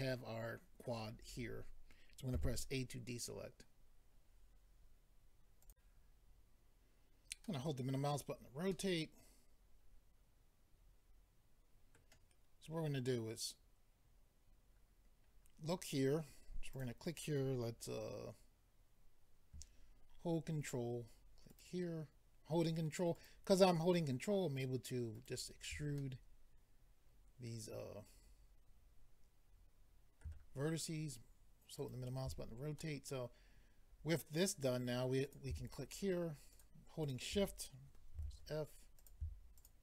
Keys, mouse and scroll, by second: 2.3 a, 5.6 click, 7.4 middle click, 8.1-8.7 scroll down 2, 8.7 middle click, 16.7 click, 21.5 ctrl+right click, 23.2 ctrl+right click, 25.1 ctrl+right click, 26.0 middle click, 31.8 ctrl+right click, 32.8 middle click, 35.2 click, 35.9 shift+click, 36.5 shift+click, 37.0 shift+click, 37.1 shift+double click, 38.1 f, 39.0 click, 39.6 shift+click.